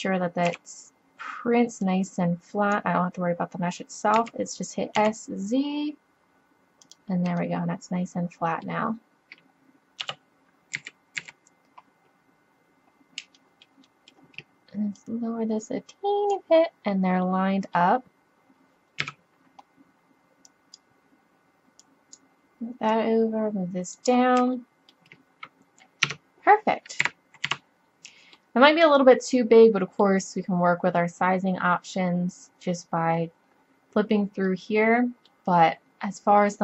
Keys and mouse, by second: 0.5 b, 1.6 click, 4.2 s, 8.4 middle click, 10.1 KP_3, 10.8 a, 11.2 a, 15.0-16.9 drag, 16.9 middle click, 19.1 KP_7, 24.2-26.1 middle drag, 26.1 Tab, 27.1 a, 27.5 z, 28.9-32.8 middle drag, 34.5 middle drag, 34.7 click.